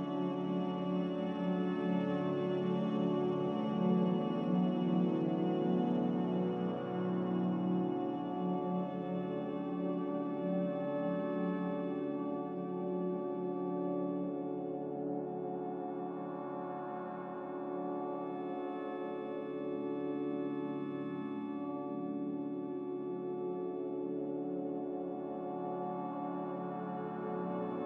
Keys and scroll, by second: 14.4 Return, 16.4 Return, 27.4 ctrl+c.